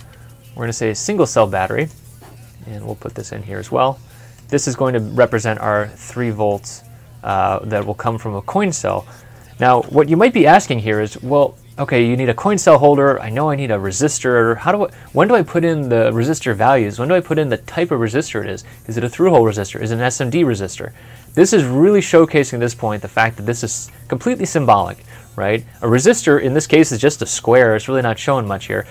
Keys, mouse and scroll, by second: 4.5 typing, 4.5 middle click, 9.2 middle click, 10.0 middle click, 10.9 ctrl+F11.